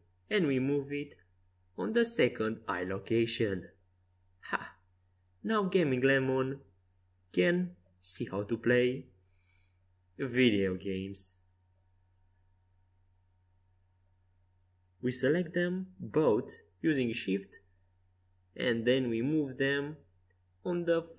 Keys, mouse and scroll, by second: 6.5 z, 7.3-9.2 middle drag, 10.2-11.9 right drag, 11.9 KP_5, 12.5-14.7 middle drag, 14.7-17.3 right drag, 17.1 g.